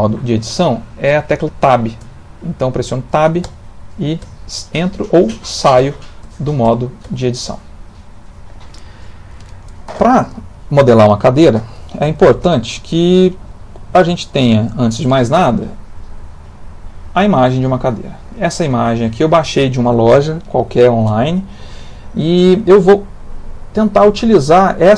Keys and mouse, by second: 2.1 Tab, 3.4 Tab, 4.8 Tab, 5.3 Tab, 5.8 Tab, 6.2 Tab, 6.6 Tab, 7.1 Tab, 7.4 Tab.